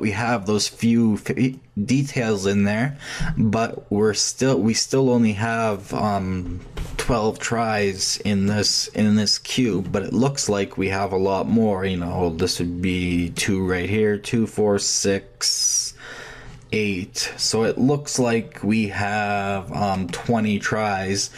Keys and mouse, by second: 18.6-21.3 middle drag.